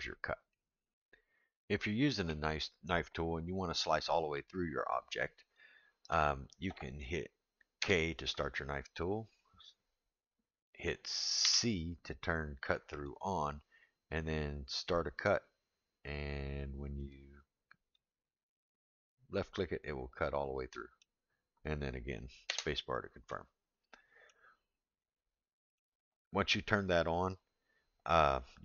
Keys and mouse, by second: 0.9-22.8 drag, 5.5-10.8 middle drag, 23.3 middle click, 25.0 middle click.